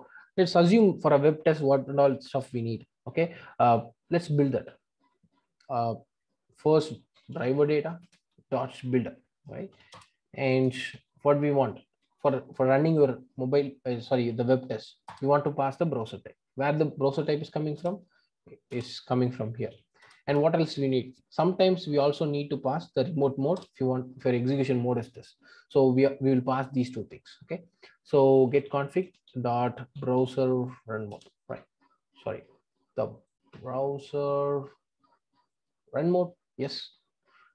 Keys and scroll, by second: 8.0 Return, 15.1 Return, 17.7 Return, 23.5 Return, 29.1 Return.